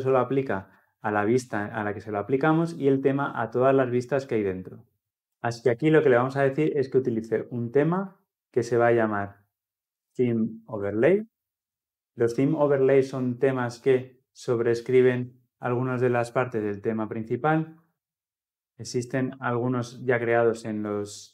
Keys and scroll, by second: 5.0 ctrl+alt+Left, 6.4 Return.